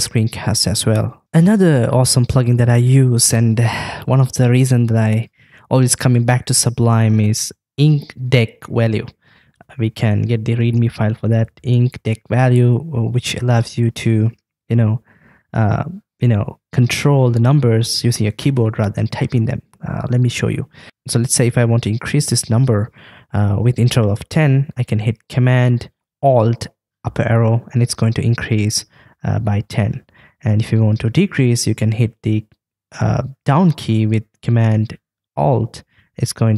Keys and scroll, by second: 9.6 shift+super+p, 27.2 alt+super+Up, 28.3 alt+super+Up, 30.3 alt+super+Up, 33.5 alt+super+Down, 35.5 alt+super+Down, 36.4 alt+super+Down.